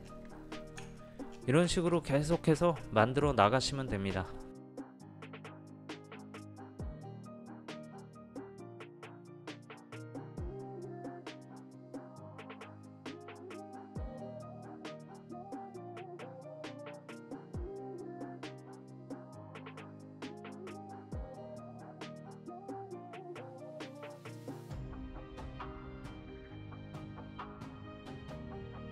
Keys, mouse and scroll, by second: 0.0 scroll down 1, 0.1 scroll up 1, 0.9-1.3 alt+scroll up 1, 1.6-2.0 alt+scroll down 2, 4.9 click, 5.2 ctrl+a, 5.3 scroll up 1, 5.4 click, 5.4 ctrl+v, 5.7 ctrl+c, 5.9 click, 6.0 v, 6.1 click, 6.3 alt+scroll up 1, 6.5 click, 6.8 Delete, 7.0 ctrl+alt+z, 7.1 scroll down 1, 7.7 click, 8.0 Return, 8.2 click, 8.3 ctrl+v, 8.4 ctrl+t, 8.5 click, 8.7 ctrl+a, 8.8 Return, 9.0 ctrl+c, 9.1 click, 9.1 v, 9.3 scroll up 1, 9.5 click, 9.8 ctrl+alt+z, 10.7 click, 11.2 Return, 11.3 click, 11.8 ctrl+a, 11.9 click, 12.0 ctrl+v, 12.1 ctrl+t, 12.2 click, 12.4 ctrl+a, 12.5 Return, 12.6 click, 12.7 ctrl+v, 12.7 click, 13.2 click, 13.5 ctrl+a, 13.6 click, 13.7 ctrl+v, 13.9 click, 14.1 ctrl+a, 14.1 Return, 14.3 click, 14.3 ctrl+v, 14.4 click, 14.8 ctrl+alt+z, 14.9 click, 15.2 click, 15.4 ctrl+t, 15.5 click, 15.8 Return, 15.9 click, 16.2 click, 16.6 click, 16.9 ctrl+a, 16.9 ctrl+c, 17.0 click, 17.1 ctrl+v, 17.2 ctrl+t, 17.3 click, 17.6 Return, 17.7 ctrl+c, 17.8 click, 18.2 right click, 18.3 click, 18.5 ctrl+z, 18.7 click, 19.1 alt+scroll down 1, 19.3 click, 19.5 click, 19.8 ctrl+a, 19.8 click, 19.9 ctrl+v, 20.1 click, 20.3 Return, 20.5 click, 20.6 ctrl+v, 20.7 click, 20.7 alt+scroll up 1, 20.9 alt+scroll down 1, 21.0 click, 21.2 click, 21.4 ctrl+a, 21.5 click, 21.6 ctrl+v, 21.8 click, 22.0 Return, 22.1 ctrl+c, 22.2 click, 22.5 alt+click, 22.8 click, 23.1 click, 23.9-24.6 typing, 24.0 Left, 24.1 click, 24.4 alt+scroll up 1, 24.4 click, 24.7 click, 24.9 Return, 25.0 alt+scroll down 1, 25.1 click, 25.6 shift+click, 25.8 shift+click, 26.2 click, 26.7 right click, 26.9 Escape, 27.0 Return, 27.0 right click, 27.1 click, 27.5 click, 27.9 click, 28.1 scroll up 1, 28.4 v, 28.5 Escape, 28.5 Return, 28.5 right click, 28.7 alt+click.